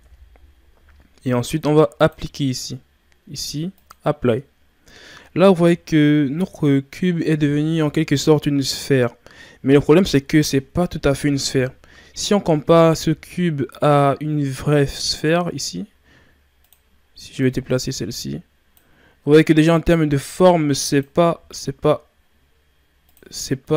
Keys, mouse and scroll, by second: 5.2 scroll up 2, 5.9-9.0 shift+scroll up 2, 12.6 shift+a, 16.6-21.3 drag, 21.3 s, 23.6-23.7 drag.